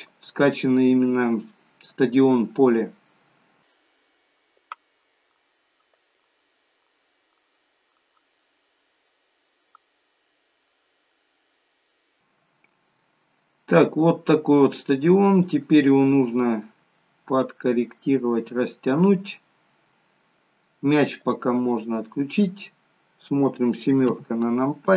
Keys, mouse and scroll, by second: 12.0-12.5 scroll down 2, 12.5-12.9 scroll up 4, 12.9 middle click, 15.4 click, 21.1 click, 21.9 middle click, 22.8-23.4 scroll down 4, 24.0 KP_7.